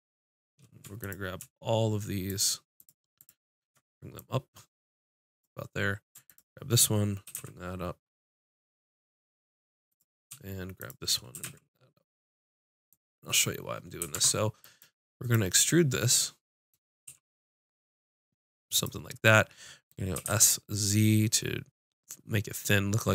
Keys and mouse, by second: 0.0-6.0 drag, 6.2 click, 7.2 g, 7.4 click, 9.9-11.3 drag, 11.3 g, 12.9 click, 14.1 ctrl+Tab, 17.0 e, 18.8-20.3 drag, 20.1 s.